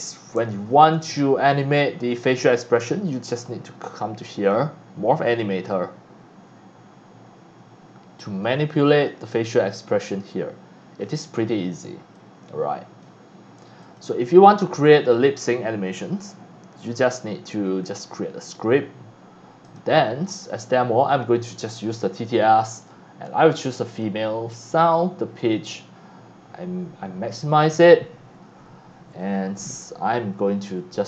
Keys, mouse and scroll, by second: 0.4 x, 0.4 click, 0.9 c, 1.0-1.6 drag, 3.1 click, 5.2 click, 8.4 click, 10.0-11.0 drag, 12.1-13.0 drag, 13.8 click, 17.8 click, 19.6 click, 21.1 click, 22.8 click, 23.9 click, 25.4 click, 27.3 click.